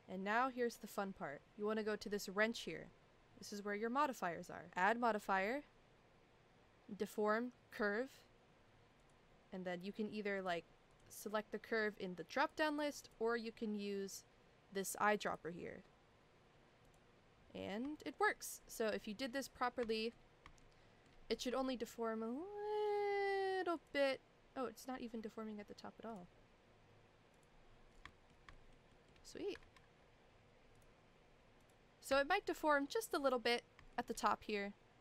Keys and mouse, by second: 2.4 click, 4.9-7.8 drag, 9.0-11.0 drag, 12.4 click, 18.0 shift+middle drag, 19.1 shift+middle drag, 19.9 shift+middle drag, 20.6-21.0 shift+middle drag, 21.6 shift+middle click, 23.8 click, 26.1 click, 28.1 shift+middle drag, 28.5 shift+middle click, 28.9 shift+middle drag, 29.6 ctrl+z, 30.8 click, 32.2 shift+middle drag, 32.9 shift+middle drag, 33.9 shift+middle drag.